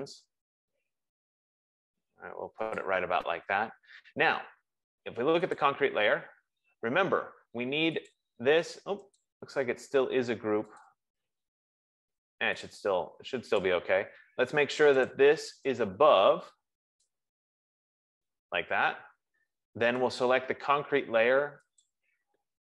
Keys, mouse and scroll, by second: 3.2 click, 6.2 click, 8.4 click, 9.4 click, 11.4 click, 13.9 click, 15.5 click, 17.4 click, 22.3 click.